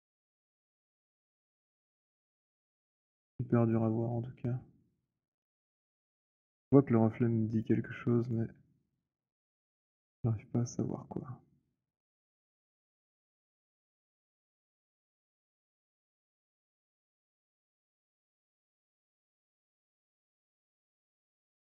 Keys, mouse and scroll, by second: 3.6 alt+click, 4.1 alt+middle click, 4.7 alt+middle click, 6.3 alt+click, 6.6 alt+scroll, 6.7 middle click, 7.0 middle click, 7.4 alt+middle click, 7.4 click, 8.3 click, 8.6 alt+click, 11.9 alt+click, 12.0 alt+click, 18.2 click, 19.2 click, 20.3 alt+right click, 21.6 alt+click.